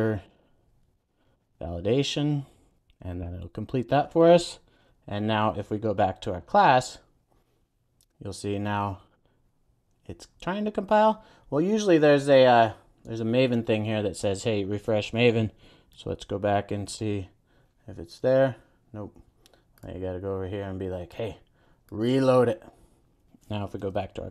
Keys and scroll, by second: 2.8 Return, 3.0 super+s, 4.2 super+e, 14.9 super+e, 23.7 super+e.